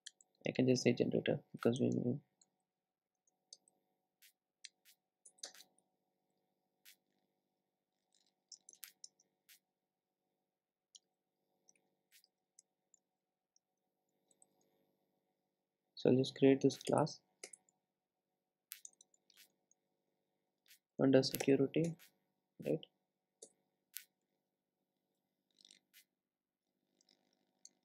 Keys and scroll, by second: 5.3 Return, 17.0 alt+Return.